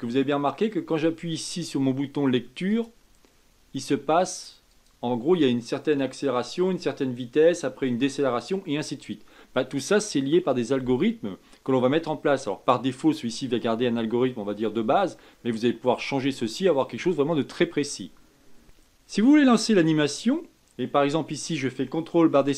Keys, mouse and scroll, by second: 2.9 click, 18.6 ctrl+space.